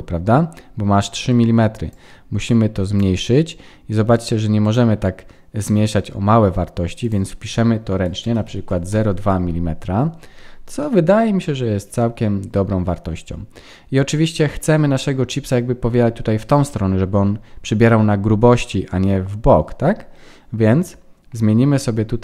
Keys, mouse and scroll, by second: 1.9 click, 4.1 click, 7.0 click, 10.7 middle click, 14.8-16.4 scroll down 1, 21.3-22.2 scroll down 3.